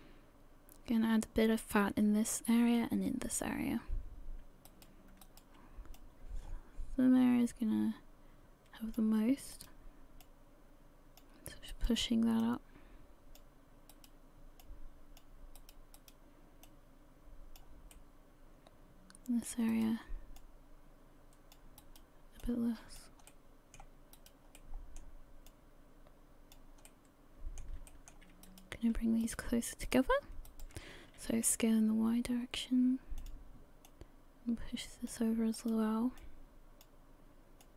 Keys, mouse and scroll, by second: 4.7 right click, 5.2 shift+right click, 6.0 click, 9.5 right click, 10.2 click, 11.7 right click, 12.4 click, 13.9 right click, 14.6 click, 15.6 right click, 16.0 right click, 16.7 click, 17.9 middle click, 20.4 right click, 20.4 click, 21.8 right click, 22.4 click, 23.3 middle click, 24.2 right click, 24.7 middle click, 25.5 click, 26.9 middle click, 27.9 shift+middle click, 28.5 right click, 29.2 shift+right click, 29.9 right click, 30.5 shift+right click, 31.2 s, 33.9 click, 35.6 right click, 36.2 click, 37.6 click.